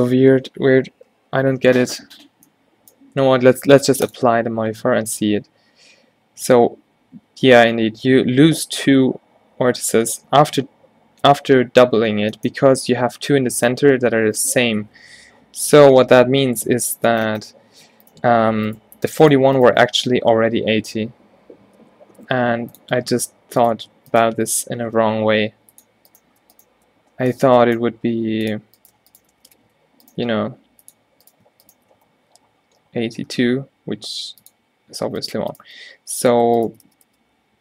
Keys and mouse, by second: 3.4 Tab, 4.7 Tab, 9.1 Tab, 10.1 ctrl+z, 12.5-15.4 drag, 15.4 ctrl+z, 16.6 Tab, 19.9 x, 25.1 g, 27.5 v, 28.9-29.5 drag, 29.5 g, 30.4 g, 32.0 x, 35.3-37.6 drag, 37.1 f, 37.3 f.